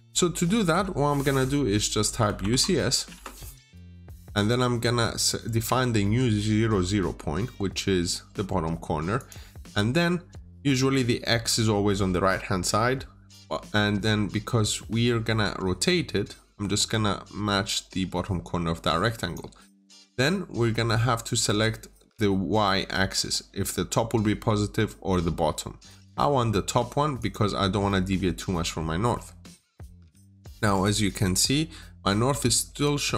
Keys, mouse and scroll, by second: 0.2 scroll up 1, 1.9-2.3 typing, 3.0 Return, 9.0 click, 27.6 scroll down 1, 27.7 middle click, 28.9-29.4 scroll up 1, 29.4 scroll down 1, 29.6 middle click, 31.6 scroll up 1, 33.0 scroll down 1.